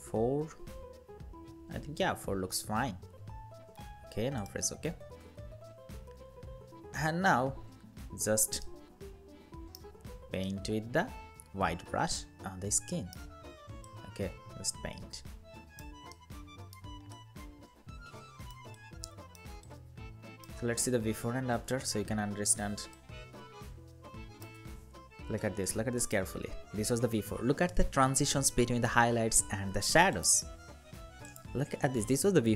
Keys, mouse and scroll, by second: 0.1 4, 8.3 alt+right click, 10.1 alt+right click, 15.8 alt+right click, 21.9 ctrl+=, 22.4 space.